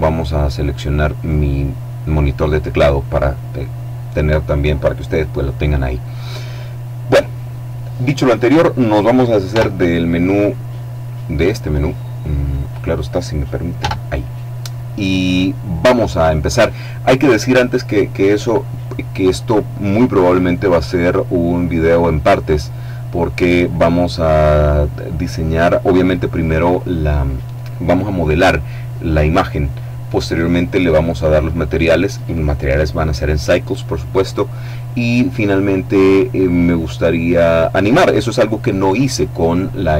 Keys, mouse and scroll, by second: 9.4 n, 12.4 click, 13.6 n.